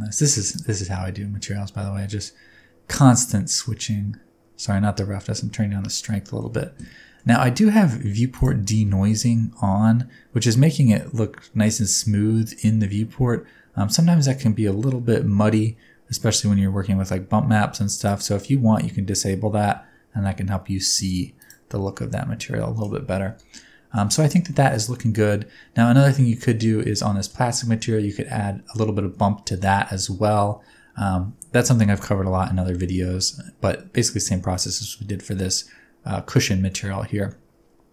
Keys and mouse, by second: 0.6-5.8 shift+drag, 6.3 shift+middle click, 6.9-7.2 middle drag, 17.9 click, 21.4 click, 23.3 KP_0, 24.5 shift+middle click, 27.0 middle click.